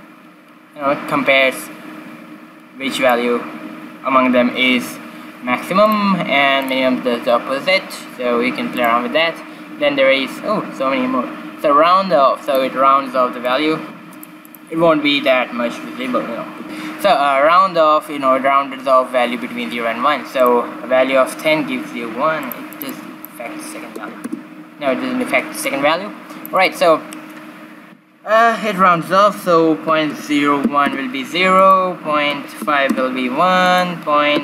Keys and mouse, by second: 5.8-7.6 drag, 8.7-10.5 drag, 13.4-16.2 drag, 20.4-22.2 drag, 22.7-24.5 drag, 25.6-28.4 drag, 31.5-33.5 drag, 33.6-34.4 drag.